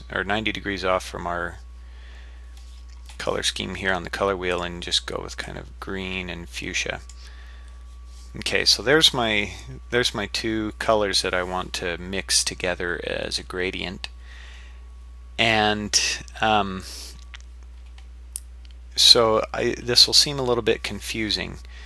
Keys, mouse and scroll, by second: 4.5-6.6 drag.